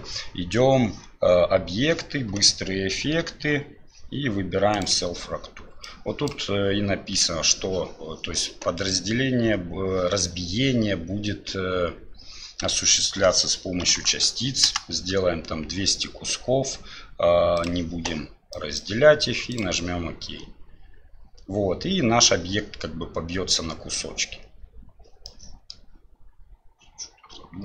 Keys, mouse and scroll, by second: 14.1 KP_0.